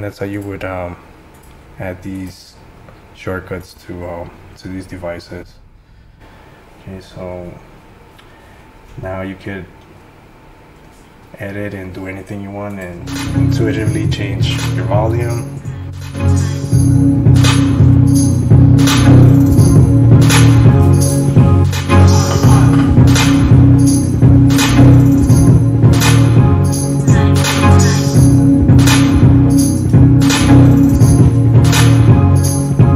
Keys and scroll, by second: 15.5 F7, 15.6 F7, 16.0 F8, 16.0 F8, 17.9 F8.